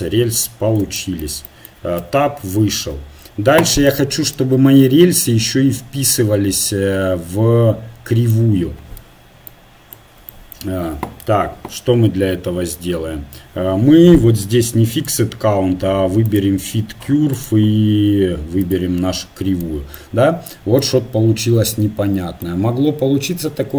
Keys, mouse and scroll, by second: 2.0 Tab, 4.1-14.0 middle drag, 14.9-17.5 drag, 17.5-19.2 right drag, 19.7-22.9 middle drag.